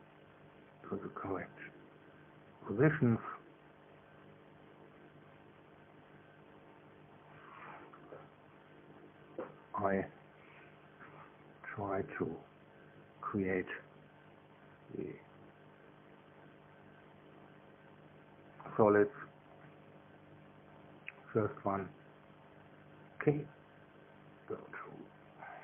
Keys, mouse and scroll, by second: 0.4-1.2 scroll down 1, 1.2 scroll down 1, 1.3 scroll up 1, 1.6 scroll down 1, 1.8 scroll up 1, 2.0-2.5 scroll down 1, 2.5 scroll up 1, 2.7-3.7 scroll down 1, 3.7 scroll up 1, 3.9 scroll down 1, 4.1 scroll up 1, 4.3 scroll down 1, 4.6 scroll up 1, 4.8-5.5 scroll down 1, 7.4 scroll down 2, 8.3 scroll down 2, 9.4 scroll down 2, 10.1 scroll down 2, 10.8 scroll down 2, 12.9 click, 20.8 click, 22.0-23.0 middle drag.